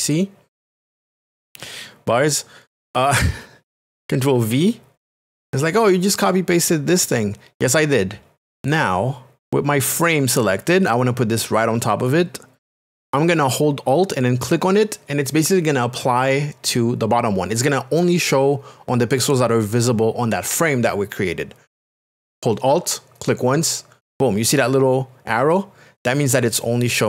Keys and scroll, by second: 0.0 shift+c, 4.3 ctrl+v.